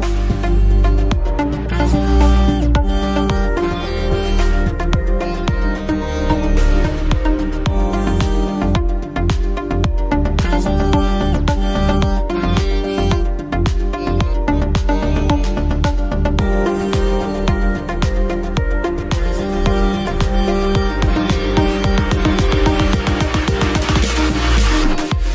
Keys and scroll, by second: 24.1 ctrl+z.